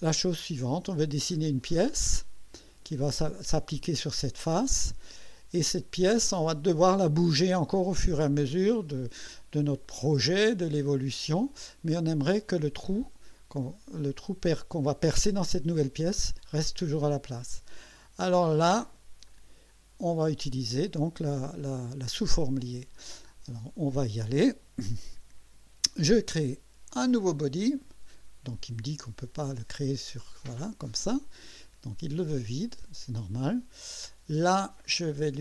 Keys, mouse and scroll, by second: 9.7-11.2 drag, 11.5 click, 18.6 scroll down 1, 19.3-20.4 right drag, 26.9 click, 29.8 click, 34.6 click.